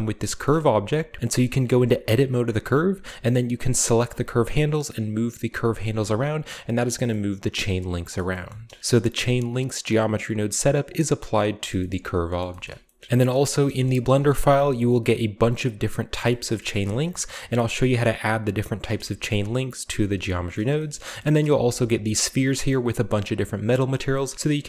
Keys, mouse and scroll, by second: 0.4-1.2 middle drag, 0.6 Tab, 0.9 scroll down 1, 1.6 Tab, 1.9 Tab, 2.3-2.7 scroll up 1, 2.7 a, 2.9 a, 2.9-3.7 scroll down 1, 3.7 right click, 4.0 g, 5.8 right click, 6.0 s, 6.6 click, 7.1-8.2 middle drag, 8.5 a, 9.8 click, 10.5 click, 10.9 click, 11.6-12.4 shift+scroll down 2, 12.4 shift+middle click, 12.7-13.4 shift+middle drag, 12.7 Tab, 13.5 shift+middle drag, 13.9-14.7 middle drag, 14.0-14.4 typing, 14.7-16.2 drag, 16.2-17.6 shift+middle drag, 16.6-17.1 typing, 16.8-17.8 shift+scroll up 2, 18.9-19.9 scroll down 1, 19.1 shift+middle click, 20.6 shift+middle drag, 20.9 middle drag, 20.9-21.9 scroll up 1, 21.6-22.2 middle drag, 21.8 b, 22.2-23.1 drag, 23.1 middle click, 23.5-24.6 scroll up 1, 23.7-24.6 middle drag.